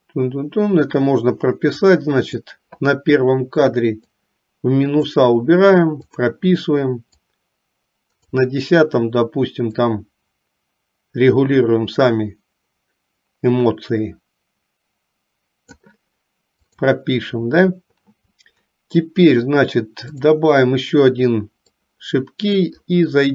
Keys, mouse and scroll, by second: 2.1 click, 4.1-5.3 drag, 6.3 click, 7.3-8.5 drag, 10.1-15.9 drag, 16.8 click, 20.2 click, 22.0 click.